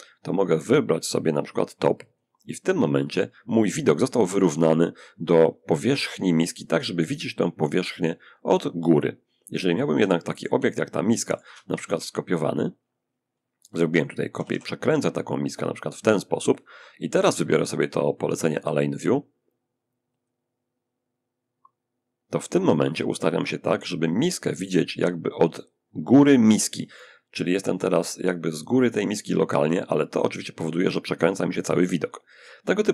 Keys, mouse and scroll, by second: 1.3 click, 8.3 middle click, 9.2 shift+scroll up 1, 9.3-11.2 shift+drag, 11.0 shift+d, 13.0 click, 13.6 r, 13.7 r, 15.2 click, 17.8 click, 19.4 click, 21.5 click.